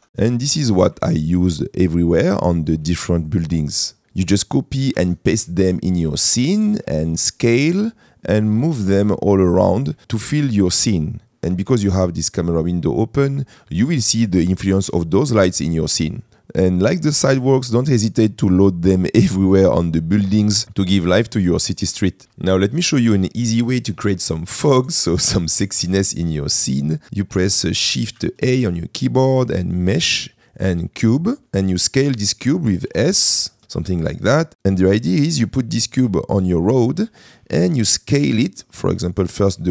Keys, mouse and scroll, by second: 0.1 KP_Decimal, 0.4 middle click, 1.3 shift+middle click, 1.8 middle click, 2.6 shift+middle click, 3.2 click, 5.7 middle click, 6.5 shift+middle click, 7.2 middle click, 8.1-8.5 middle drag, 10.0 middle click, 16.3 middle click, 17.1-17.7 middle drag, 18.5-19.0 middle drag, 19.3-19.7 middle drag, 24.3 middle click, 26.1 shift+middle click, 26.6 middle click, 28.2 shift+a, 31.4 Escape, 31.4 g, 33.0 s, 33.6 middle click, 33.7 middle click, 34.9 shift+middle drag, 35.6 middle click, 36.2 shift+middle click, 37.8-39.4 drag.